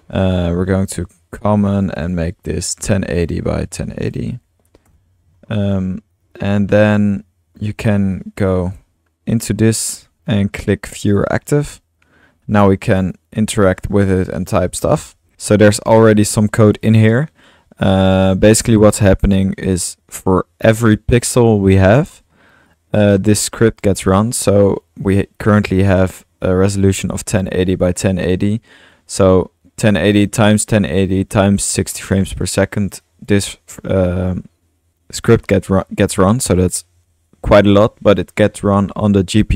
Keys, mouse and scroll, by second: 7.1 middle click, 8.2-8.7 drag, 11.2 click, 12.0 middle click, 12.4-12.9 drag, 13.0 click, 13.4 drag, 14.1-15.8 typing, 15.3-16.4 alt+drag, 16.4-16.8 middle drag, 16.8-17.3 drag, 17.9-18.5 drag, 18.8 drag, 19.7-21.2 drag, 22.7-23.1 drag, 24.5-24.9 drag, 24.6 typing, 25.1-25.5 drag, 25.9-28.9 drag, 29.2-33.0 drag, 33.3-35.2 drag, 36.1-37.9 drag.